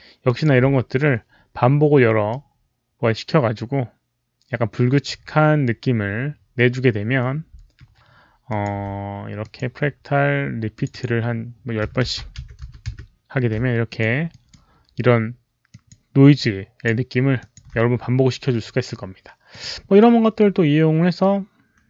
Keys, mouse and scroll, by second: 0.1 alt+click, 2.2-4.9 alt+drag, 2.2 alt+right click, 8.4 alt+click, 8.4 alt+right click, 9.3 click, 9.4 alt+right click, 9.8 alt+right click, 10.6 alt+click, 10.9 alt+click, 11.7 alt+click, 11.7 KP_1, 12.1 Tab, 12.1 alt+click, 12.1 KP_0, 12.1 KP_1, 13.8 Tab, 13.8 alt+click, 14.2 alt+right click, 14.3 Return, 14.3 Tab, 14.3 KP_0, 14.3 KP_1, 15.6 alt+click, 16.3 alt+click, 16.6 alt+right click, 16.7 Return, 16.7 KP_0, 16.7 KP_1, 17.3 alt+click, 19.4 click, 19.5 Return, 19.5 alt+right click, 21.6 Return, 21.6 alt+click, 21.6 alt+right click.